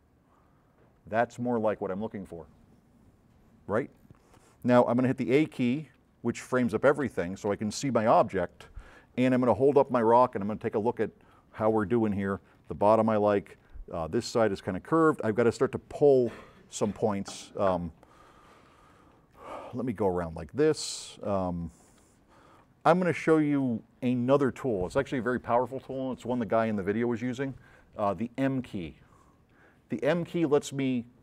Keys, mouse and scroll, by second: 4.0 click, 5.8 a, 6.6 a, 7.2 a, 18.7 s, 19.0 click, 19.8 scroll up 1, 20.2-20.5 scroll down 2, 21.3 right click.